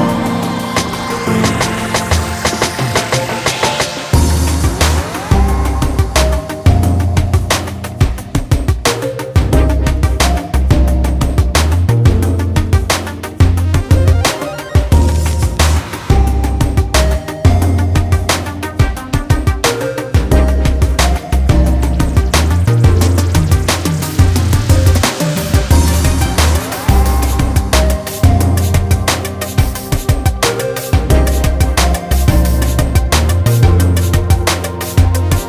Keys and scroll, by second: 10.9 alt+Delete, 17.7 ctrl+d, 33.6 ctrl+space, 34.1 ctrl+space, 34.3 ctrl+space, 35.1-35.4 ctrl+space.